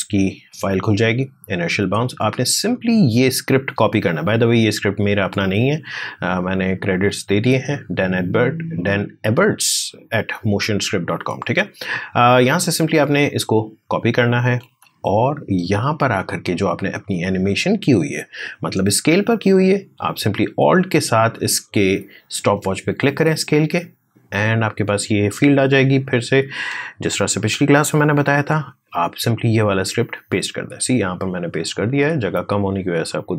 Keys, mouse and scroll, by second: 2.5-6.3 drag, 12.1 right click, 13.3 click, 14.3 alt+Tab, 17.7-21.0 drag, 25.5-28.8 drag, 28.8 ctrl+v, 31.1-32.8 drag, 32.8-33.3 scroll up 1.